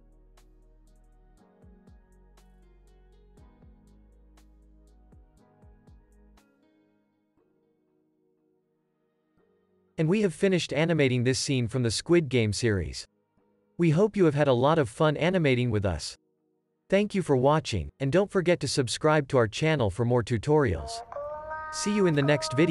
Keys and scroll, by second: 9.0 space, 9.8 super+s, 11.4 space.